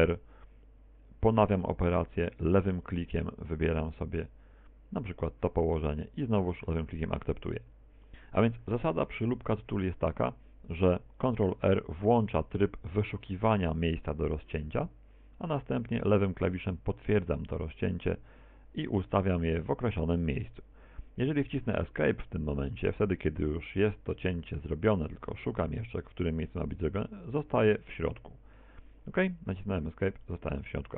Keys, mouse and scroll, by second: 6.3 ctrl+click, 8.1 middle click, 9.1 KP_1, 12.8 ctrl+r, 30.3 middle click.